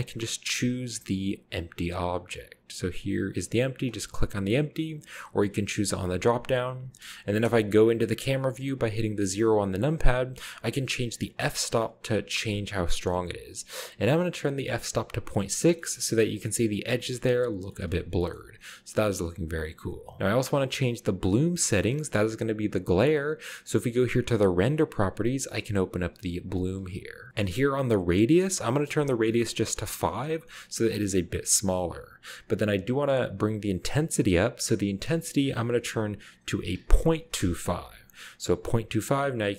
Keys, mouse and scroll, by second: 3.9 click, 5.5 click, 6.1 click, 6.6 click, 9.1 KP_0, 10.7 click, 11.7-12.8 drag, 15.6-16.4 shift+middle drag, 15.8-16.7 scroll up 1, 16.9 shift+middle click, 17.5-18.5 scroll down 1, 18.1 shift+middle drag, 18.4 shift+middle click, 19.2-19.7 shift+middle drag, 20.2 ctrl+b, 23.2 click, 25.6 click, 26.0 scroll down 1, 28.4 click, 29.6 5, 30.9 click, 35.0 click, 36.7-37.2 typing, 37.3 Return, 39.2-39.5 scroll up 1.